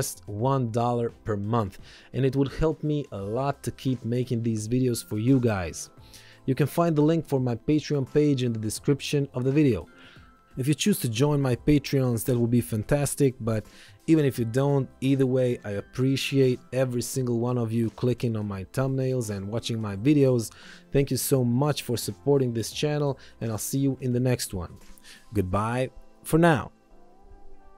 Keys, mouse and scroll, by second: 12.5 click.